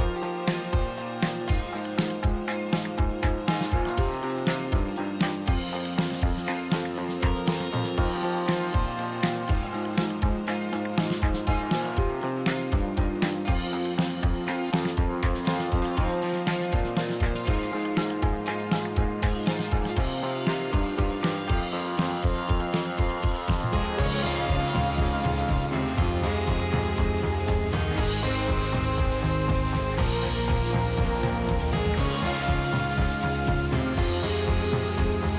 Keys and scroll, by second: 1.1 q, 3.3 2, 5.6 space, 7.1 space, 10.6 space, 13.1 space, 16.5 space, 17.3 space, 18.1 space, 20.3 z, 21.5 shift+Escape, 25.8 space, 27.2 space, 28.4 space, 29.3 ctrl+z.